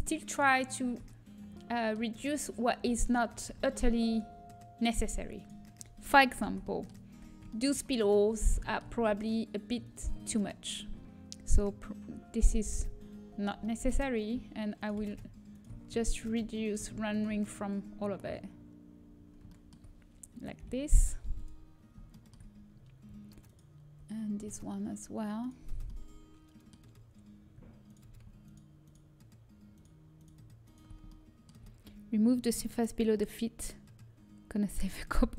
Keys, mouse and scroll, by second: 0.5 right click, 0.6-2.4 drag, 0.7 Tab, 2.8 Tab, 6.3 Tab, 9.8-11.8 drag, 11.8-12.9 right drag, 12.9-14.7 middle drag, 14.7 right click, 15.2 click, 15.6-17.2 right drag, 17.6 middle click, 20.5 Delete, 23.7-25.3 middle drag, 25.8-27.2 middle drag, 27.8-31.1 middle drag, 31.1-33.2 right drag.